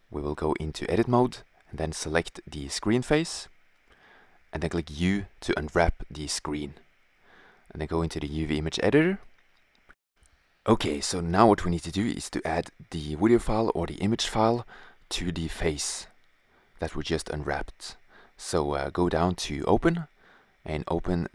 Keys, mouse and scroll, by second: 1.0 click, 2.1 right click, 2.8 middle click, 4.4 u, 6.4-7.6 drag, 7.8-8.9 drag, 10.2-11.4 middle drag, 16.4-18.2 drag, 18.2-19.3 middle drag.